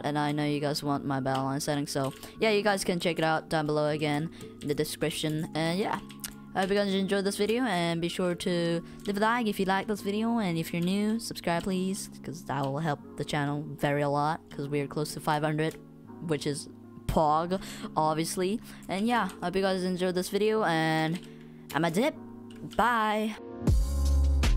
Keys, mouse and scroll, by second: 1.8-2.6 typing, 2.7 click, 2.7 right click, 2.7 click, 2.8 right click, 4.1-7.6 typing, 4.7 click, 5.4 right click, 6.3 right click, 7.7 click, 7.7 right click, 17.8 w, 18.8 right click, 19.0 w, 19.2 space, 20.3 right click, 20.4 click, 21.8 space, 22.4 w.